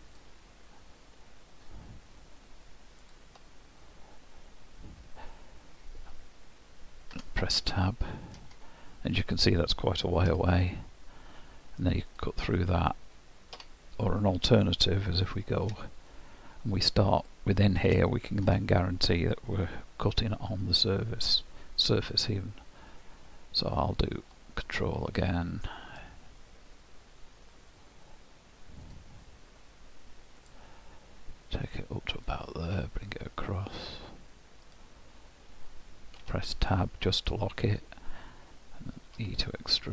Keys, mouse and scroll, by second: 7.6 middle click, 8.6-9.3 scroll down 6, 15.4 ctrl+KP_3, 16.2-18.0 scroll up 7, 18.0 shift+middle click, 24.6 ctrl+click, 36.7 middle click, 37.5-38.8 scroll down 3.